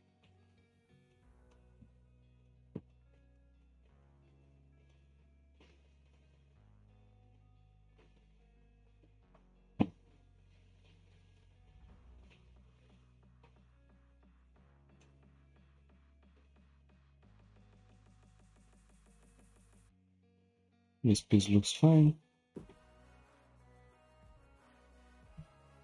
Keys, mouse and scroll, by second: 0.0 Tab, 0.2 click, 1.1-1.9 shift+middle drag, 1.9 Tab, 2.4-3.9 shift+middle drag, 3.9-4.4 scroll down 1, 4.4-4.9 scroll down 1, 4.9-7.9 middle drag, 14.4 alt+click, 15.0-17.5 middle drag, 17.5 Tab, 17.9-20.1 middle drag, 20.1-20.8 scroll up 2, 20.8 click, 21.2 Tab, 21.8-23.1 shift+middle drag, 23.1-23.7 scroll up 1, 23.7 scroll up 1, 24.0 Tab, 24.1-25.8 shift+middle drag.